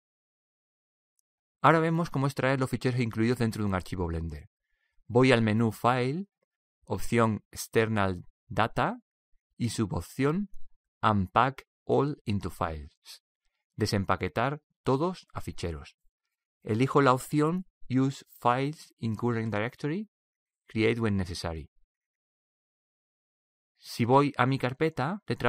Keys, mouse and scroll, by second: 1.2 ctrl+s, 3.0-4.4 middle drag, 6.5-8.7 drag.